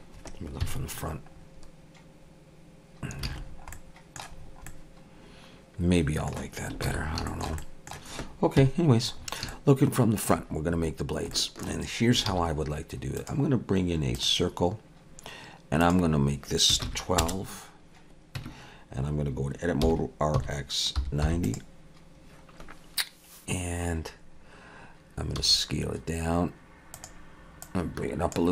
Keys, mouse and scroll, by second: 0.6 KP_1, 1.3-3.2 scroll up 2, 3.3 alt+a, 3.4-4.4 scroll down 4, 3.7 middle click, 4.4 scroll down 2, 4.7 middle click, 6.9 ctrl+s, 7.3 shift+middle click, 7.6 middle click, 8.6 KP_1, 9.2 scroll up 3, 9.5 shift+middle click, 11.0 scroll down 2, 11.3 shift+middle click, 12.3 shift+a, 15.8 click, 18.4 Tab, 19.8 r, 25.4 s, 27.6 click.